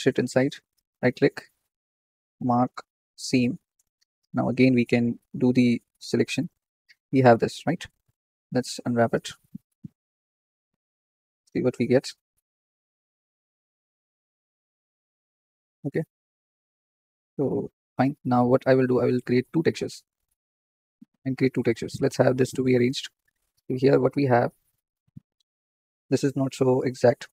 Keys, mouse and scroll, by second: 0.8-3.3 right drag, 6.3 a, 6.9 scroll down 1, 7.1 scroll up 1, 8.9-9.4 drag, 9.6 scroll up 4, 17.6 Tab, 18.2-18.7 scroll down 9, 22.9 Tab, 23.7-26.7 shift+middle drag.